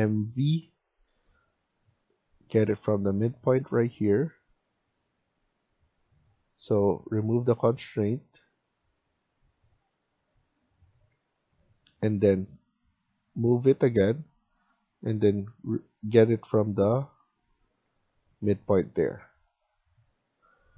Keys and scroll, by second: 0.0-0.4 typing, 11.1 Escape, 11.3 Escape.